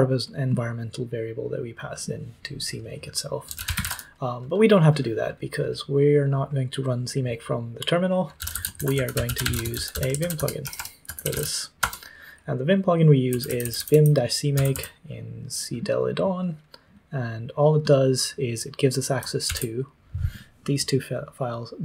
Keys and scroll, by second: 3.2-4.3 typing, 8.1-11.7 typing, 13.2-15.2 typing, 19.4 ctrl+d.